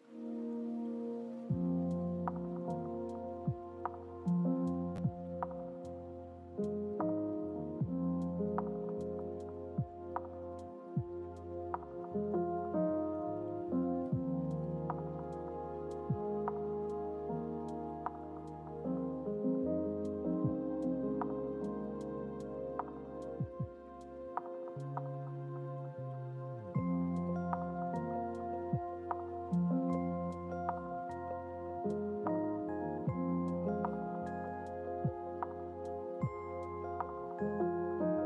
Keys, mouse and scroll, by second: 5.9-11.0 drag, 13.9 click, 21.2 click, 22.2-28.9 drag, 29.9 click, 31.2 click, 35.3 click.